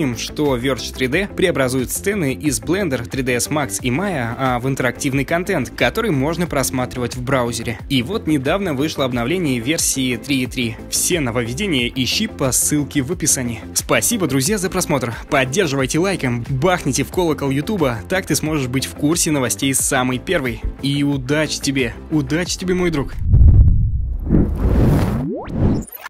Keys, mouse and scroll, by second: 0.3 middle click, 1.4 alt+h, 1.4 click, 1.6 click, 1.8 click, 2.0 shift+click, 2.2 ctrl+shift+s, 2.4 ctrl+click, 2.6 ctrl+click, 2.8 shift+click, 3.9 middle click, 4.1 shift+middle click, 5.1 middle click.